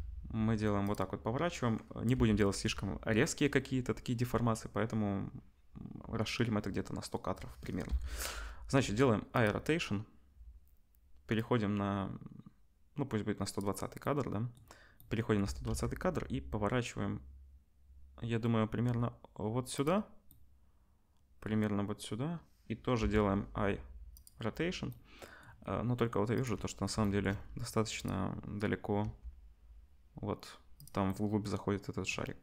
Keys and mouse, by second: 2.1 i, 7.8 i, 11.4-19.8 drag, 15.4 r, 23.0 i, 26.3 click, 27.9 click, 28.0-32.4 middle drag, 29.0 g.